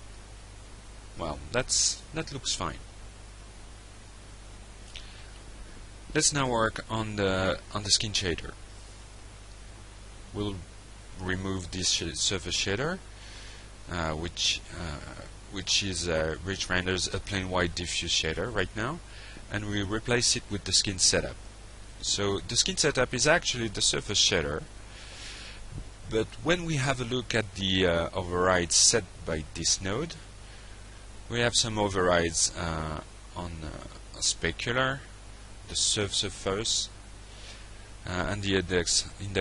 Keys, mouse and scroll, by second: 1.4 alt+Tab, 6.5 middle click, 8.2 click, 9.1 click, 11.0 click, 13.0 Delete, 14.4 ctrl+space, 15.4 s, 15.7 i, 16.5 Down, 17.7 Return, 18.4-19.4 drag, 19.7-20.4 drag, 20.5 click, 21.7 click, 22.9 click, 23.7 click, 29.3 click, 37.3 click, 38.9 click.